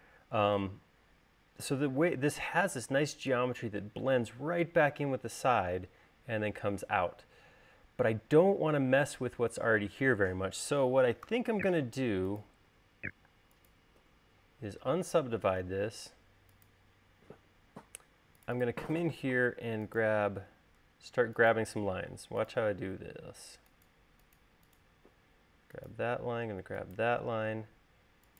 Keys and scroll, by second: 11.5 u, 12.9-14.2 typing.